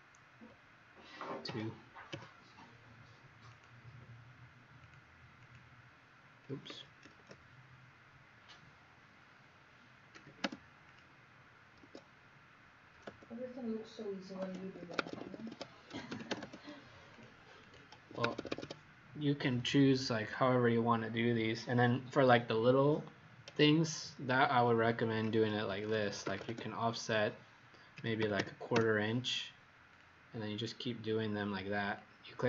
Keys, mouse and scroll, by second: 1.4 KP_2, 2.1 KP_Enter, 3.4 click, 5.4 click, 7.1 ctrl+z, 10.1 2, 10.8 click, 11.8 Escape, 14.5 Escape, 14.7 Escape, 14.9 Escape, 15.0 Escape, 15.3 Escape, 15.4 Escape, 15.6-16.5 typing, 17.1 click, 17.5 click, 18.2 Escape, 18.4 Escape, 25.4-26.8 typing, 28.1 KP_2, 28.7 Return, 29.8 click, 30.6 click, 31.8 click.